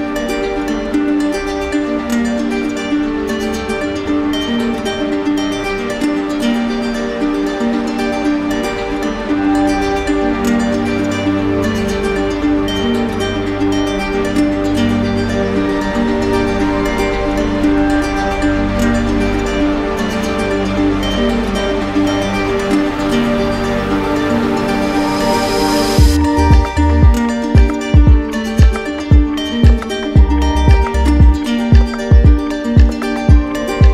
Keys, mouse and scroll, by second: 3.6 click, 4.4 click, 5.9 alt+click, 6.9 alt+click, 7.5 click, 11.2-12.4 drag, 12.9 z, 15.3-16.4 drag, 17.2-18.3 drag, 18.8-19.9 drag, 23.0-24.1 drag, 30.8-31.8 right drag, 32.1 click, 33.7 click.